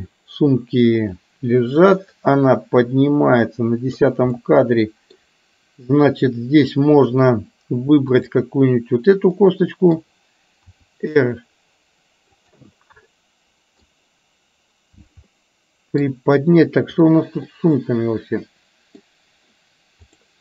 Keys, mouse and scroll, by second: 1.2-4.1 drag, 4.4-5.2 middle drag, 8.1 click, 9.4 middle click, 10.9 r, 13.2-13.9 middle drag, 15.4 middle click, 17.0 drag, 17.5-19.1 middle drag, 20.1 click.